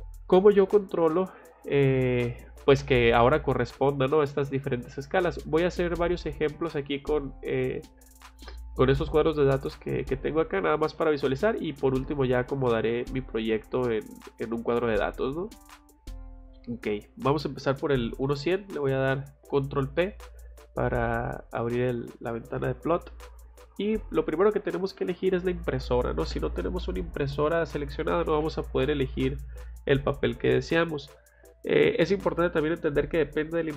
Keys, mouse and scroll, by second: 4.9 middle click, 10.9 middle click, 15.2 middle click, 15.2-15.6 scroll up 1, 18.4 ctrl+p, 26.1 click, 28.8 click.